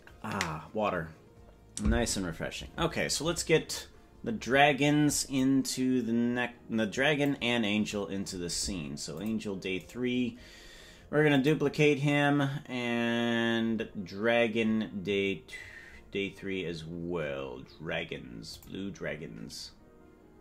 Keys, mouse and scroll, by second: 5.4-7.4 drag, 9.1 click, 9.7-13.6 right drag, 13.6-14.2 scroll up 5, 15.0-15.5 scroll up 5, 15.5-15.8 scroll down 3, 15.8-16.7 scroll down 5, 16.7-18.5 scroll down 1, 18.5 click, 18.5 scroll down 1, 19.0-19.5 scroll down 2, 19.2-19.5 scroll up 1, 19.5-20.4 scroll down 1.